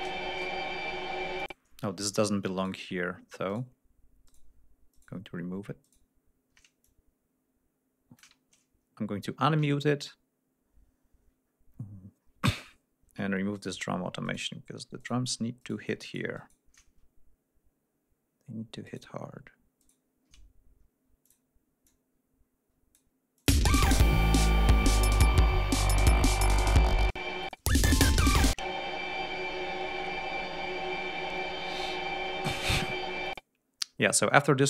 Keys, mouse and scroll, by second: 0.5 shift+scroll up 2, 1.4 click, 2.6 shift+right click, 3.5 shift+right click, 4.3 shift+right click, 4.9 shift+right click, 5.8 shift+right click, 6.8-8.4 shift+drag, 8.5-9.1 ctrl+scroll down 4, 9.7-13.0 ctrl+scroll up 12, 13.5 shift+middle click, 14.2 shift+middle click, 15.0 shift+middle click, 15.6 shift+middle click, 16.0 shift+middle click, 18.9 shift+right click, 19.8 shift+right click, 21.2 click, 21.9-23.1 drag, 23.4 click, 23.5 space, 23.9 ctrl+scroll down 2, 25.5 ctrl+scroll down 2, 26.5-26.9 scroll down 2, 27.1 space, 27.4 click, 28.0-28.3 scroll down 1, 28.6 space, 28.9-29.2 scroll down 1, 29.6 ctrl+scroll up 2, 30.2 ctrl+scroll down 3, 30.7-32.2 scroll up 6, 32.4-32.7 scroll up 2, 33.2 click.